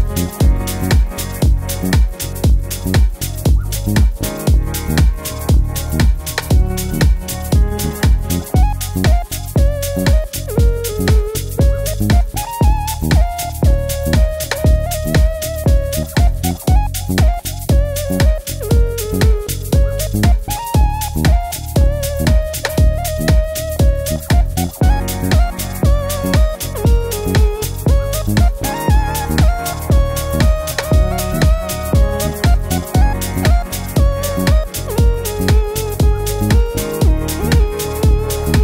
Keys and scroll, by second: 2.2 d, 25.0 d, 36.1-36.9 typing, 37.0 Left, 37.1 Left, 37.2 Left.